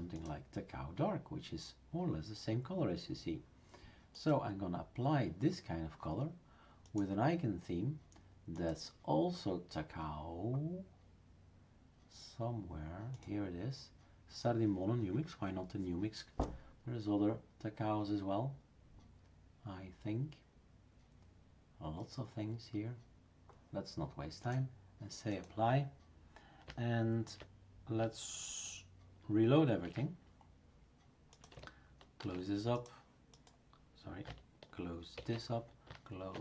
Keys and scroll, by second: 29.7 shift+super+r, 32.2 shift+super+s, 35.1 shift+super+q.